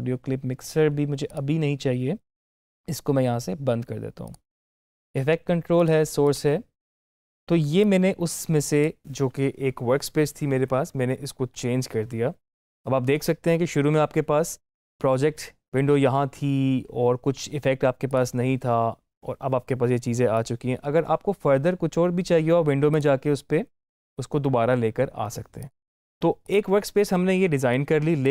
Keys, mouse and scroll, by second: 18.0 click, 22.8 click, 22.8 click, 25.5-28.3 drag.